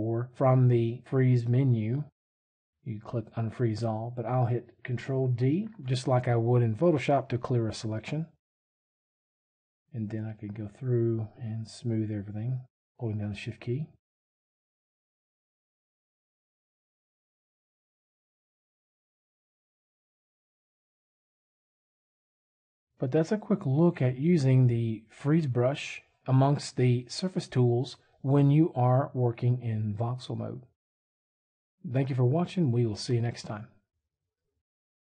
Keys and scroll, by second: 5.3 ctrl+d.